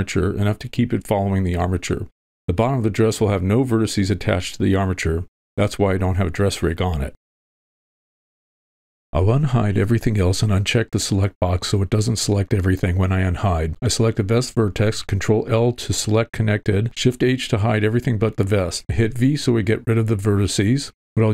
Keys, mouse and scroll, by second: 0.6 click, 10.3 alt+h, 10.9 click, 12.7 v, 14.5 w, 14.6 click, 15.1 ctrl+l, 16.0 shift+h, 17.6 v, 18.5-18.8 shift+middle drag, 19.1-19.8 middle drag, 20.9 click.